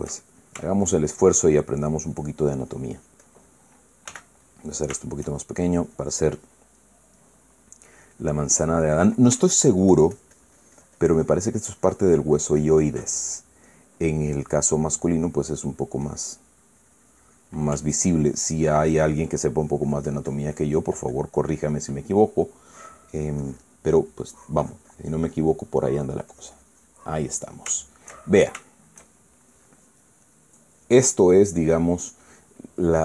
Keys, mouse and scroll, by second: 1.3-2.1 shift+scroll up 1, 2.6-4.4 drag, 4.8 f, 5.1 click, 5.7 shift+middle click, 6.1 shift+middle click, 6.3-8.4 shift+drag, 8.6 click, 9.5 click, 10.0 ctrl+click, 10.2-13.8 ctrl+drag, 13.8-15.4 ctrl+middle drag, 15.5 click, 16.3 middle click, 16.8-18.4 drag, 18.5-20.0 ctrl+drag, 20.3-22.8 ctrl+drag, 23.0 middle click, 23.7-24.9 drag, 24.5 middle click, 25.0-26.5 drag, 26.6 middle click, 27.0 click, 27.8-29.3 middle drag, 29.4-30.6 shift+middle drag, 31.1-33.0 middle drag.